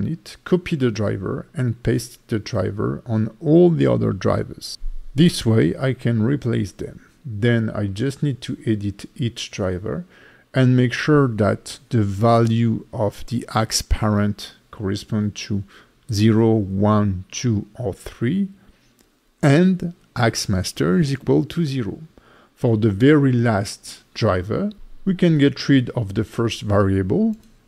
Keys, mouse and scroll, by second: 0.6 right click, 1.9 right click, 3.6 right click, 8.1 right click, 12.9 right click, 21.6 right click, 23.5 right click.